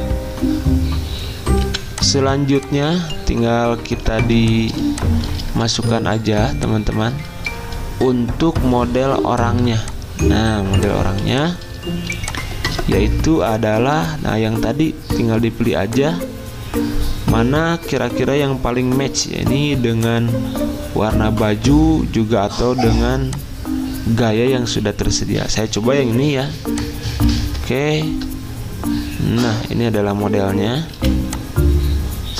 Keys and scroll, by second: 1.6 v, 4.2 z, 5.5 v, 11.1 z, 12.1 alt+Tab, 27.5 alt+Tab, 30.9 v.